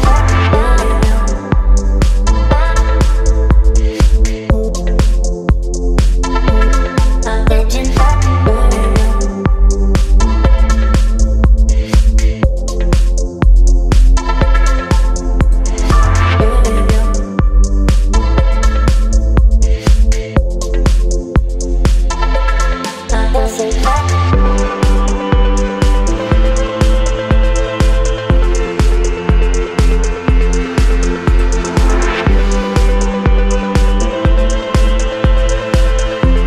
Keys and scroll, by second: 3.6 space, 5.4 space, 12.2 space, 18.5 space, 19.9 space, 26.6 v, 29.8 space, 31.9 Return, 35.9 ctrl+t.